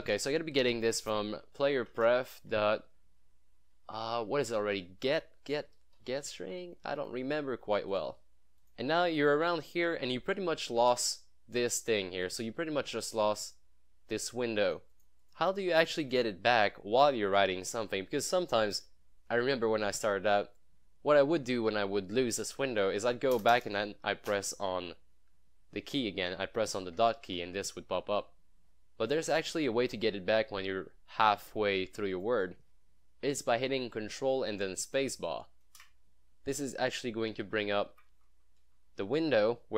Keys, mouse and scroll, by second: 0.0-0.6 typing, 1.9 Down, 2.0 Tab, 2.3 ., 3.7 g, 6.1 e, 6.6 Down, 7.0 Left, 8.0 click, 10.8 ctrl+space, 14.7 click, 23.4 BackSpace, 24.4 ., 26.8-27.8 typing, 29.2 click, 35.7 ctrl+space, 37.7 Down, 38.0 Up, 38.6 Down, 38.9 Up, 39.0 Down.